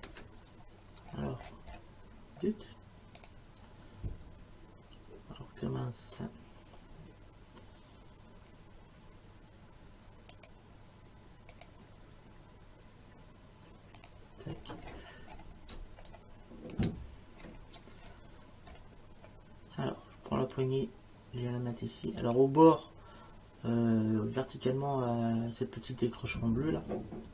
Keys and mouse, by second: 3.2 click, 10.3 click, 11.5 click, 14.0 click, 15.7 space, 16.1 click, 16.7 space, 20.5 click, 22.2 click.